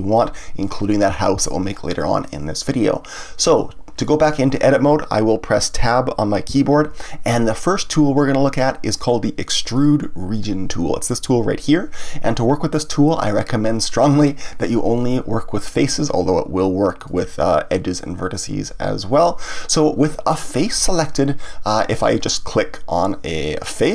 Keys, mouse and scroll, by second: 4.0-6.5 middle drag, 6.5 Tab, 9.7 click, 17.0 click, 23.5 click.